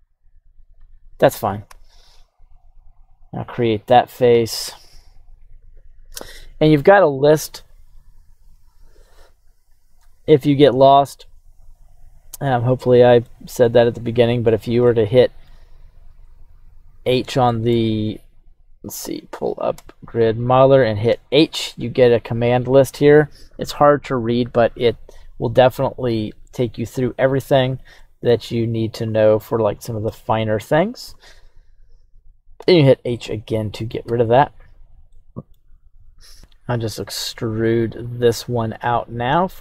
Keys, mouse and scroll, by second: 2.9 click, 4.2-5.5 drag, 13.3 middle click, 13.9 h, 14.8 middle click, 15.7 right click, 16.1-17.0 scroll down 2, 16.3 h, 17.5 middle click, 18.0 right click, 19.7 q, 27.9 middle click, 33.1-36.3 middle drag, 34.0 KP_1, 36.3 click, 37.0-39.6 middle drag.